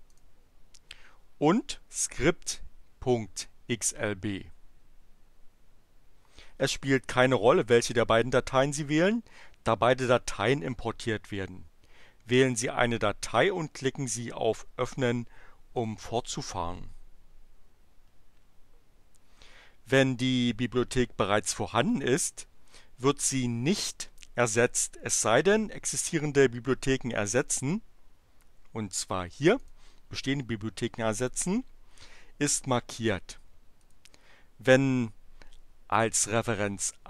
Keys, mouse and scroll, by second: 0.0 click, 15.6 click, 29.6 click, 33.5 click.